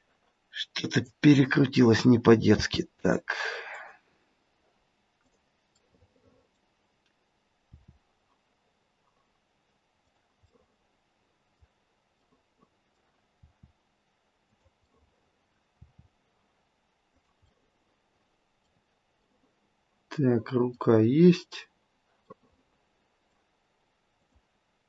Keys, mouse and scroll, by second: 0.7 scroll up 2, 1.7 click, 2.6 r, 5.2 click, 5.8 middle click, 6.1 middle click, 6.7-7.7 scroll down 2, 7.7 r, 10.4 middle click, 11.2 middle click, 11.4 middle click, 12.2 middle click, 13.3 r, 14.9 middle click, 15.8 r, 17.3-18.8 scroll up 1, 18.8 middle click, 19.2 middle click, 20.6 middle click, 20.9-21.4 scroll down 1, 22.3 middle click, 23.2 middle click, 24.1 click.